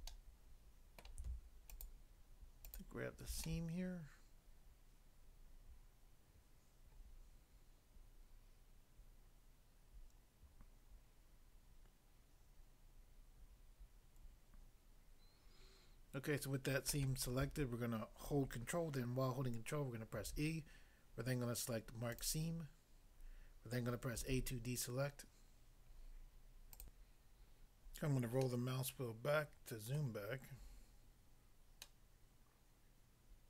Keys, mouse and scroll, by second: 0.1 middle click, 1.0 middle click, 1.7 alt+click, 2.7 alt+click, 3.4 middle click, 16.9 middle click, 20.1 ctrl+e, 22.1 click, 22.3 click, 24.2 a, 26.8 click, 27.1 click, 27.9 scroll down 1, 28.4 middle click, 30.0 middle click, 31.9 middle click.